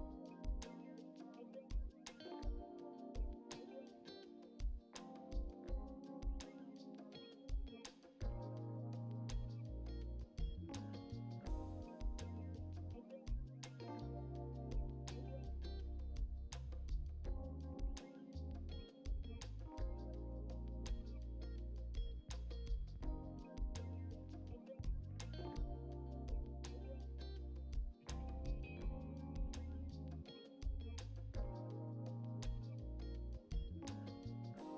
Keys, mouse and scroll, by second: 0.1 middle click, 0.6 click, 0.9 click, 1.4 scroll down 4, 1.5 middle click, 2.2 click, 2.3 middle click, 2.4 ctrl+z, 2.5 ctrl+z, 2.6 middle click, 2.8 click, 2.9 shift+middle click, 3.1 scroll up 3, 3.3 shift+middle click, 3.4 click, 3.8 Delete, 4.1 click, 4.5 Delete, 4.7 click, 4.9 Delete, 5.2 click, 5.4 Delete, 5.7 Delete, 5.9 click, 6.1 Delete, 6.6 Delete, 6.6 click, 6.8 scroll down 1, 7.4 Delete, 8.3 alt+click, 8.7-9.8 shift+middle drag, 9.8 shift+d, 11.9 g, 12.4 KP_1, 13.8 s, 14.2 middle click, 14.5 s, 15.6 KP_1, 16.4 g, 17.1 r, 18.2 g, 18.7 middle click, 19.1 alt+shift+click, 20.1-20.8 drag, 20.9 click, 21.3 middle click, 22.1-23.4 drag, 24.4 click, 25.1 click, 26.5 click, 26.7 click, 26.9-27.5 drag, 27.8 middle click, 29.9 click, 30.9 middle click, 31.3 KP_1, 32.3 click, 33.2 middle click, 33.7 click, 34.4 g.